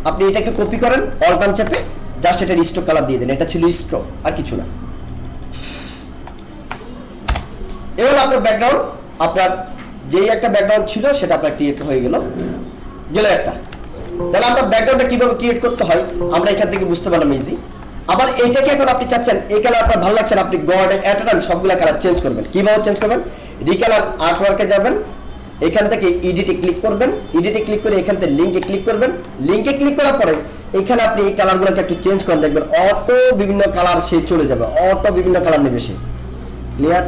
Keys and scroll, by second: 7.3 BackSpace, 13.8 alt+space, 14.7 ctrl+=, 15.9 alt+space, 17.1 ctrl+-, 19.0 ctrl+=.